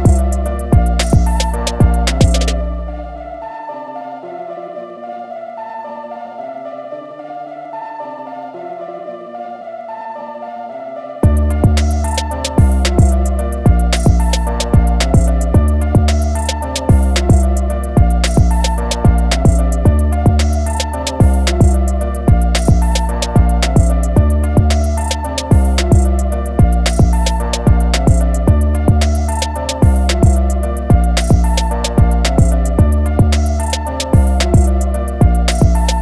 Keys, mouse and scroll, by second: 1.8 ctrl+click, 3.4 ctrl+click, 5.7 ctrl+click, 8.1 ctrl+click, 9.0 click, 10.8 ctrl+click, 12.3 ctrl+click, 13.5 ctrl+click, 13.9 click, 14.8 alt+scroll down 1, 17.6-18.1 typing, 18.8-19.5 alt+scroll up 2, 19.5 click, 21.6 ctrl+click, 22.2 ctrl+click, 22.5 ctrl+click, 23.2 ctrl+click, 24.0 ctrl+click, 25.2 ctrl+click, 25.9 ctrl+click, 26.9 click, 27.6-28.0 alt+scroll down 1, 28.3 alt+scroll down 1, 29.7 click, 31.9 ctrl+click, 34.8 ctrl+click.